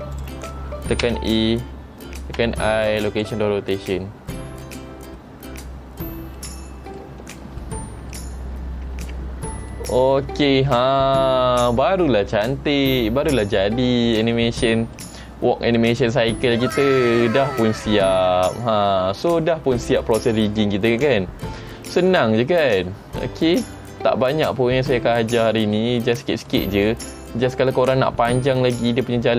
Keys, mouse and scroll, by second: 1.2 a, 2.6 i, 4.7 space, 6.5 middle click, 7.3-7.8 scroll down 3, 7.8 middle click, 9.2 ctrl+Tab, 9.6-10.2 scroll down 2, 9.9 middle click, 14.5 middle click, 16.2 middle click, 22.3 middle click, 23.4 middle click, 24.3-24.6 scroll down 1, 24.6 middle click, 25.9 middle click, 27.2 middle click.